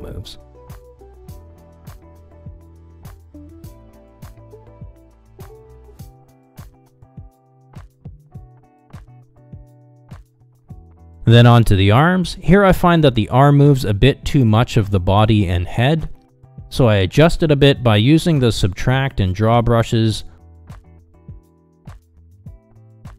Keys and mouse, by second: 1.7 middle click, 2.3 click, 3.5 click, 4.5 middle click, 4.7 click, 5.3 middle click, 5.6-6.7 drag, 6.8 click, 8.0 ctrl+Tab, 8.6 click, 9.1 ctrl+Tab, 9.4 g, 11.8 ctrl+z, 12.0 middle click, 13.3 middle click, 13.6 shift+middle click, 14.9 click, 16.0-17.7 drag, 18.1 click, 18.5 f, 19.0 f, 19.3 click, 19.4 click, 19.6 click, 20.3 click, 20.6 middle click, 20.9 click, 21.3 middle click, 21.6 click, 21.7 middle click, 21.9 click, 22.1 click.